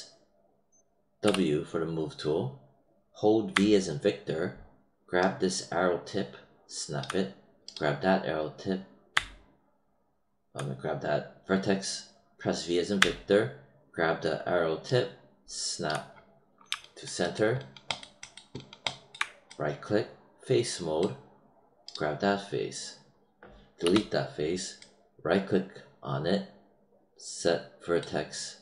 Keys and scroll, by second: 1.2 w, 3.5 v, 9.0 v, 12.9 v, 23.7 BackSpace.